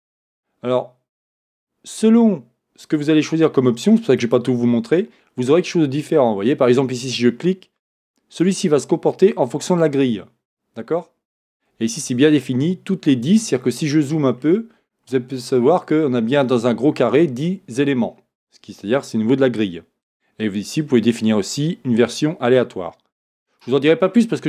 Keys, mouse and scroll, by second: 13.8 scroll up 1, 21.0-24.4 drag, 24.0-24.4 scroll down 1.